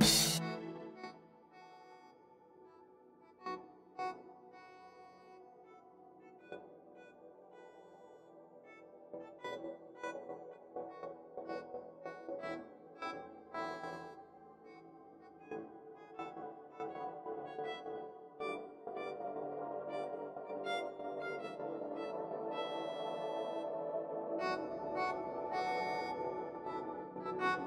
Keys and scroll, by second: 10.8 ctrl+alt+z, 11.3 ctrl+alt+z, 11.5 ctrl+alt+z, 18.3 ctrl+alt+z.